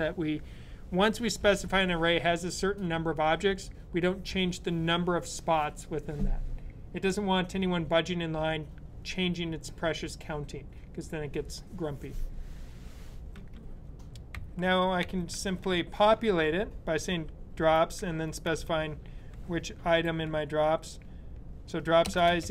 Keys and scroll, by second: 14.2-16.3 typing, 17.4-18.4 typing, 19.8 typing, 22.0-22.5 typing.